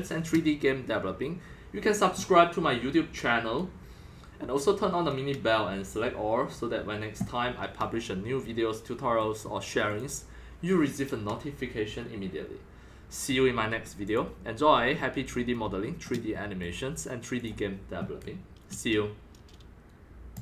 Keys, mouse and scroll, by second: 2.7-4.8 middle drag, 4.8 scroll up 2, 8.5 middle click, 9.2 middle click, 10.0-11.7 drag, 12.3 click, 13.3 middle click, 13.9 scroll, 14.1 click, 14.9 scroll, 15.0 scroll, 15.2 scroll, 15.4 scroll, 16.0-17.4 shift+middle drag, 17.4-20.4 drag.